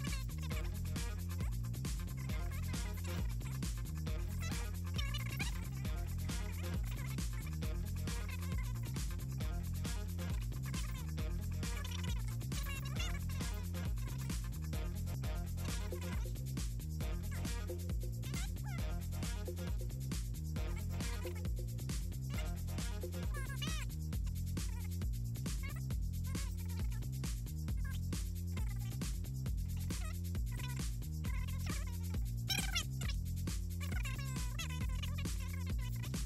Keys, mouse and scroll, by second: 0.5 click, 0.8 click, 1.8 click, 2.2 click, 2.8 Delete, 3.7 click, 6.6 click, 7.0 click, 7.8 click, 8.4 Down, 8.7 Up, 9.3 Up, 9.8 Up, 10.4 click, 10.6 click, 11.0 click, 12.2 click, 13.6 shift+Left, 14.2 click, 14.4 middle click, 15.8 ctrl+click, 16.3 click, 17.2 scroll up 2, 17.3 middle click, 17.6-19.4 typing, 18.8 click, 21.2-22.1 typing, 22.5 click, 22.8 click, 23.6 t, 24.7 click, 25.2 click, 25.5 1, 25.8 click, 26.0 click, 26.5 click, 27.4 click, 27.8 3, 28.7 click, 28.9 click, 29.1 click, 29.4 click, 29.9 click, 30.7 shift+click, 31.4 click, 31.6 click, 32.3 click, 32.4 click, 33.2 middle click, 33.7 middle click, 34.0 middle click, 34.6 middle click, 35.0 middle click, 35.8 Down, 36.1 Down.